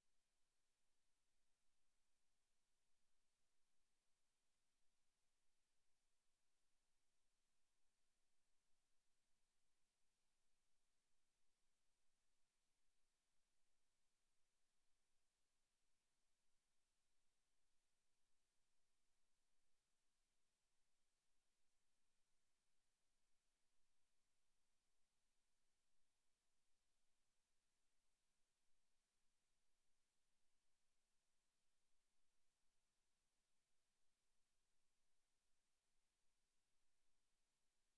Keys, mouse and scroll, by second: 0.7 click, 0.9 middle click, 2.4 r, 2.9 click, 3.2 z, 3.9 ctrl+z, 4.4 z, 7.0 shift+a, 10.2 click, 11.6 middle click, 13.3 middle click, 13.8-17.2 typing, 19.0 r, 21.4 middle click, 22.8 click, 24.2 Tab, 25.0 BackSpace, 25.2 BackSpace, 25.4 BackSpace, 25.5 BackSpace, 28.1 click, 29.1 Tab, 29.4 z, 30.5 Tab, 31.4-33.2 typing, 35.3 Tab, 35.8 middle click, 36.8 scroll up 1, 37.2 shift+middle click.